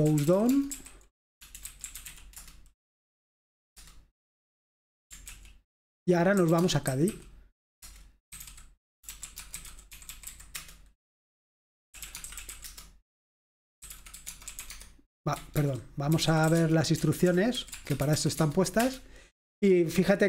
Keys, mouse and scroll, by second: 0.0-2.7 typing, 4.0 Return, 5.4 ctrl+l, 6.2-18.8 typing, 7.8 Return, 18.9 Return.